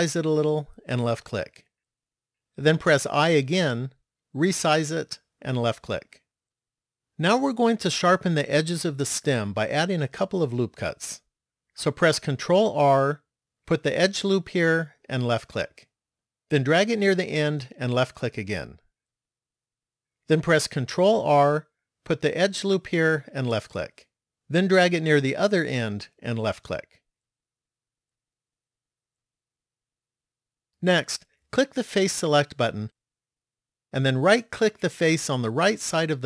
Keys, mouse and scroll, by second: 3.1 i, 12.7 ctrl+r, 21.3 ctrl+r, 28.3 middle click, 32.8 click, 34.9 right click.